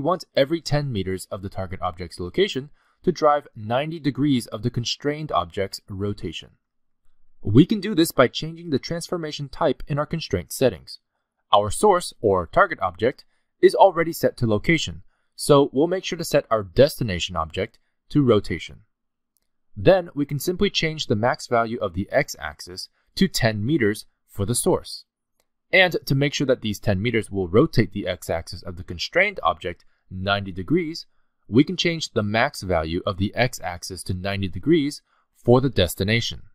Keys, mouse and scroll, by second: 3.5 click, 11.9 click, 12.5 click, 18.3 click, 23.5 click, 30.6 click.